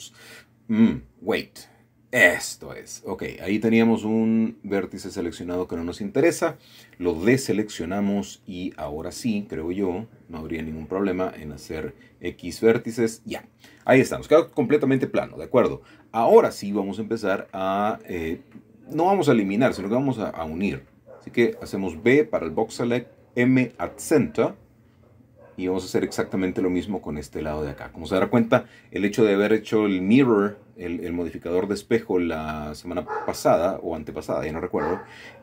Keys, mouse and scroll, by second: 0.4 ctrl+middle click, 3.3 middle click, 4.5 middle click, 5.1 click, 6.0 middle click, 7.0 middle click, 11.2 middle click, 11.9 x, 12.3 click, 14.1 shift+middle click, 14.7 shift+middle click, 15.0 scroll up 1, 16.3 typing, 17.6 typing, 18.9-20.4 drag, 22.3 m, 22.9 click, 23.8-24.3 scroll down 1, 24.6 middle click, 26.2 shift+middle click, 26.8 shift+middle click, 27.1-27.9 scroll up 1, 27.7-28.7 shift+middle drag, 28.8 shift+middle click, 29.9 shift+middle click, 31.4 b, 33.1-34.3 drag, 35.3 m.